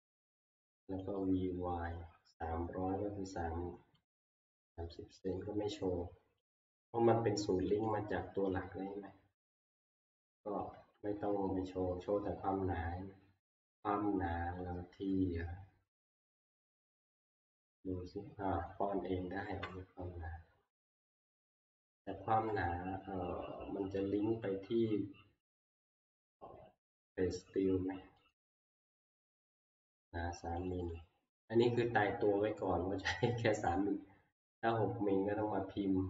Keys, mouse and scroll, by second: 1.2 click, 4.1 click, 5.3 click, 6.5 click, 7.8 click, 9.6 click, 10.7 Escape, 16.4 click, 17.7 click, 19.5 Escape, 24.5-26.5 scroll, 28.3 click, 30.7 click, 30.9 click.